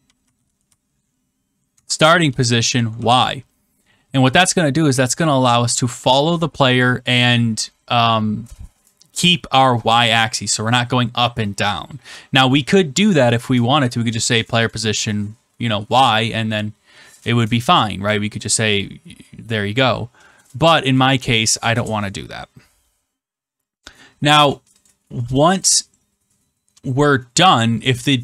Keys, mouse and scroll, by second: 0.0-2.4 typing, 2.9 ctrl+s, 24.8 click, 25.5 Return.